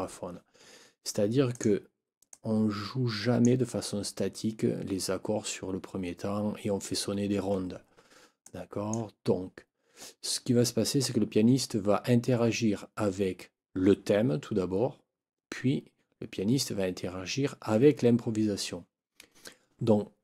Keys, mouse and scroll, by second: 1.5 click, 2.3-3.6 drag, 8.4 click.